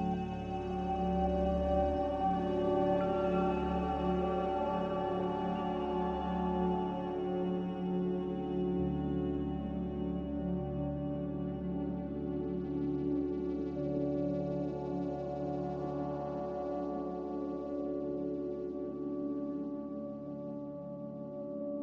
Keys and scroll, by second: 3.3 s, 4.5-4.9 typing, 6.5 Caps_Lock, 8.1 Tab, 8.6-9.6 typing, 18.9 z.